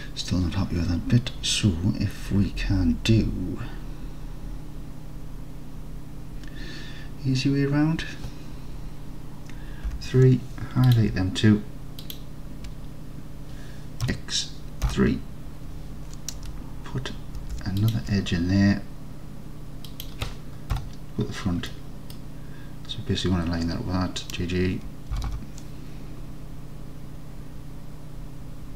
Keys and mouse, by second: 9.9 3, 14.1 x, 17.4 ctrl+r, 19.9 click, 20.8 KP_1, 21.7 click, 25.2 g, 25.4 g.